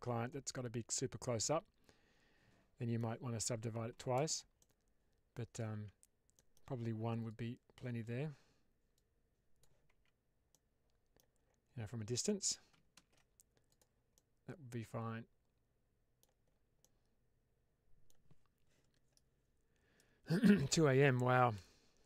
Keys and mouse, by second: 0.3-2.9 middle drag, 4.0 shift+space, 4.5-5.2 middle drag, 5.6 Tab, 6.2 middle click, 7.2 click, 8.9 click, 9.8 Tab, 10.4-11.1 middle drag, 12.1 middle click, 12.8 shift+space, 13.6 click, 14.0-16.1 middle drag, 16.7-18.0 middle drag.